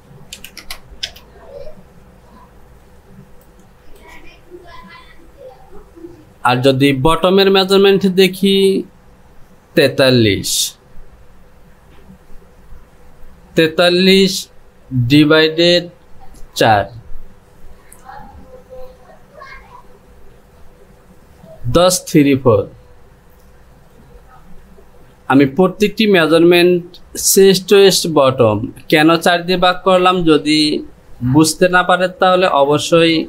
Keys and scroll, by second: 0.6 KP_1.